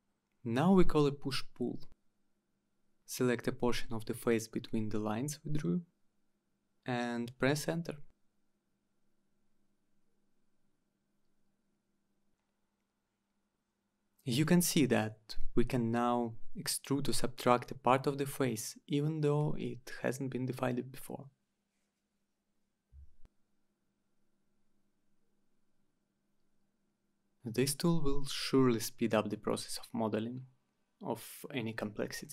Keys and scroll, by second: 0.4 Down, 1.4 Return, 4.7 Return, 8.4 Return, 13.1 Return, 16.1 Return, 18.9 Return, 21.5 Return, 27.0 Return, 31.7 Return.